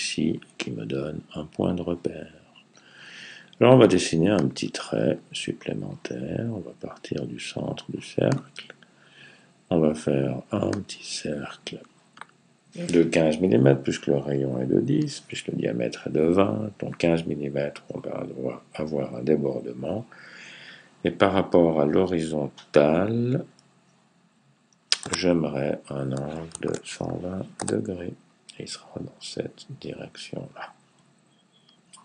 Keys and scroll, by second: 26.1-27.2 typing.